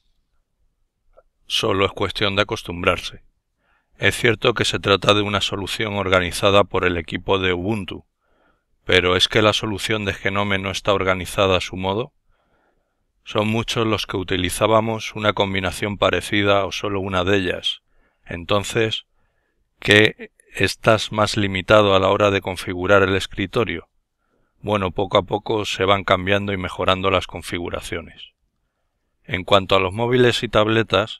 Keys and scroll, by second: 10.1 ctrl+Tab, 11.1 ctrl+Tab, 11.8 ctrl+Tab.